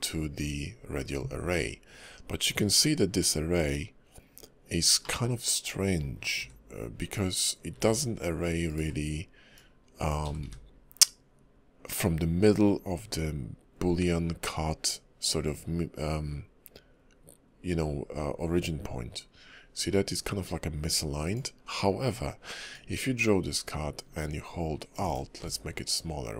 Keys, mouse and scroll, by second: 5.0 middle click, 9.5 click, 9.5 v, 22.7 click, 25.4 alt+click.